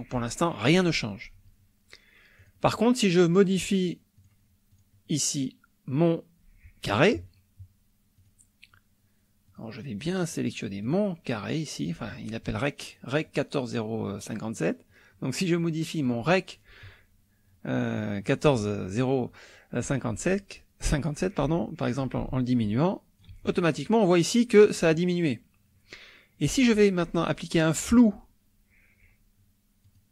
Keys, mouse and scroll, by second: 2.4 click, 4.2 click, 4.7 click, 8.2 click, 9.5 click, 10.2 click, 10.8 click, 15.6 click, 16.1 click, 22.0-23.4 ctrl+shift+drag, 29.8 click.